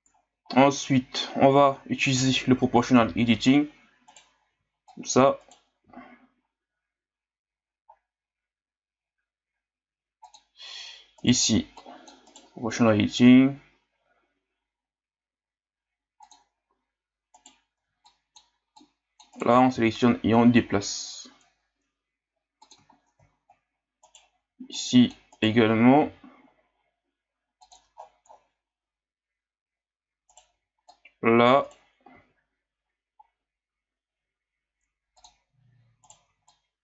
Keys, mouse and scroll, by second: 0.2 scroll down 2, 0.5-3.0 scroll up 1, 3.0 o, 4.1 right click, 4.5 c, 5.8 g, 11.2 right click, 11.4 c, 12.6 g, 17.4 right click, 17.7 c, 19.7 g, 22.9 scroll up 2, 24.0 right click, 24.4 c, 26.1 g, 28.0-28.4 scroll up 10, 30.3 right click, 30.5 c, 32.1 g, 36.0 right click, 36.2 c.